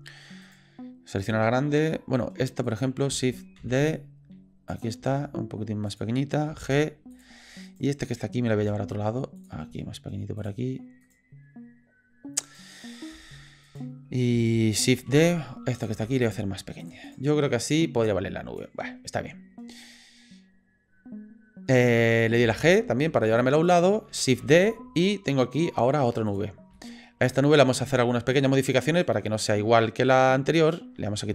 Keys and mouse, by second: 0.4 click, 2.6 click, 3.6 shift+d, 5.0 s, 6.5 g, 8.6 g, 9.7 s, 11.0 click, 12.4 click, 13.7 click, 15.1 shift+d, 16.0 s, 17.1 click, 18.0 click, 22.4 g, 24.4 shift+d, 26.9 shift+drag, 28.0 shift+click, 28.5 click, 28.9 click, 30.6 click.